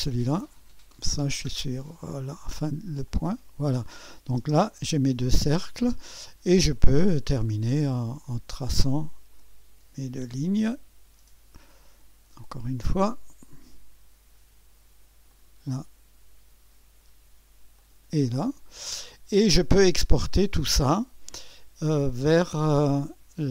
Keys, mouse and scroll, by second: 3.0-4.3 drag, 4.3 space, 5.1 space, 6.7 click, 8.5 click, 10.2 click, 12.8 click, 15.3-18.8 drag.